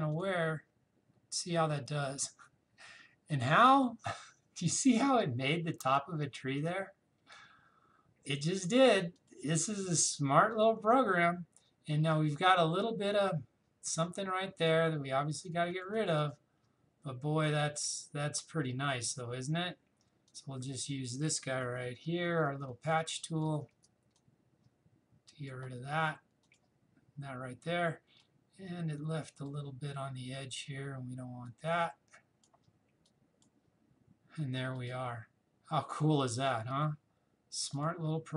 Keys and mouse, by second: 2.4 click, 9.2 click, 14.6-20.3 drag, 21.6-24.1 typing, 24.2-34.8 drag.